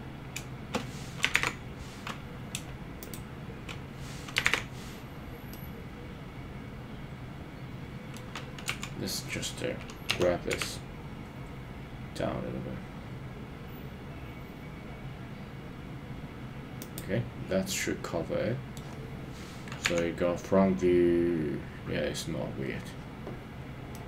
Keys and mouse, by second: 1.4 super+z, 3.0 shift+click, 4.9 super+z, 5.5-8.2 middle drag, 8.8 KP_3, 10.1 g, 10.5 z, 16.8 click, 17.7-18.8 middle drag, 19.9 KP_1, 23.9 middle click.